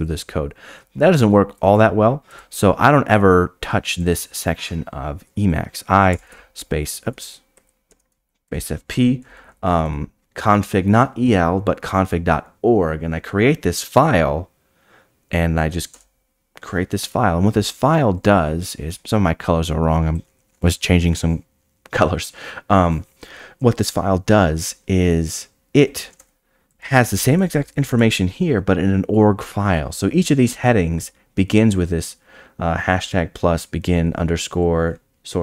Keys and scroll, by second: 1.5 d, 5.9-6.8 typing, 7.7 Escape, 30.4 Tab.